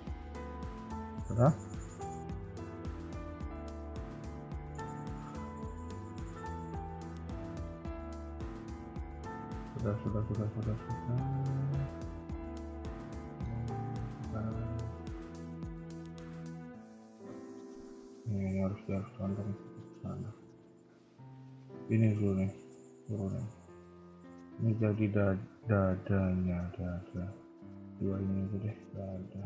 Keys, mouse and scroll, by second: 0.1 shift+middle click, 0.4-1.5 scroll up 1, 6.2 middle click, 9.3 middle click, 13.6-14.2 scroll up 1, 15.2 KP_1, 15.4 KP_3, 16.1 shift+middle click, 19.9 KP_1, 20.4 KP_3, 21.0 KP_1, 21.9 click, 23.0 ctrl+click, 24.0 ctrl+click, 24.2 g, 27.5 click, 28.0 shift+click, 28.3 g.